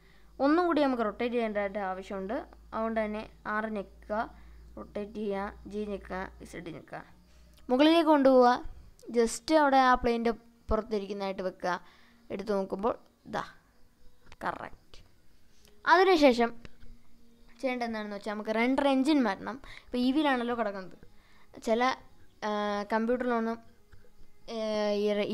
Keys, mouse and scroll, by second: 1.9 click, 2.9 r, 5.4 click, 6.5 g, 6.9 z, 11.1 click, 11.9-13.5 middle drag, 13.6-15.2 middle drag, 16.1-17.1 drag, 17.2-23.4 middle drag.